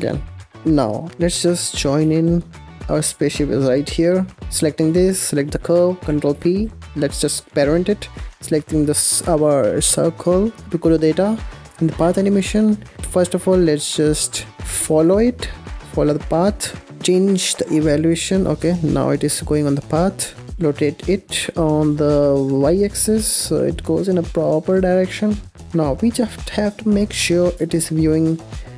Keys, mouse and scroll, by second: 0.5-2.0 middle drag, 2.0 ctrl+j, 2.6 click, 2.8-4.2 middle drag, 4.2 click, 5.3 shift+click, 6.2 ctrl+p, 8.1 click, 11.8-14.4 drag, 14.8 click, 15.7-16.1 scroll down 1, 16.1-17.0 middle drag, 17.4-18.6 drag, 18.6 ctrl+z, 20.5 click, 20.6 r, 25.6 click, 27.4 KP_0, 28.1-28.5 scroll down 4.